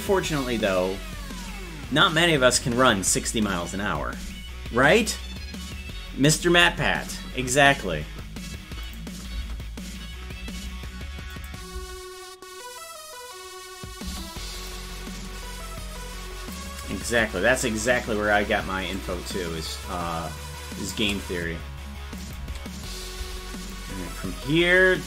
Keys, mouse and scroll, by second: 8.8 click, 9.3 space, 11.3 click, 11.3 space, 11.7 space, 14.7-16.5 drag, 18.9-20.9 shift+drag, 22.2 click, 23.7-25.0 drag, 23.7 space.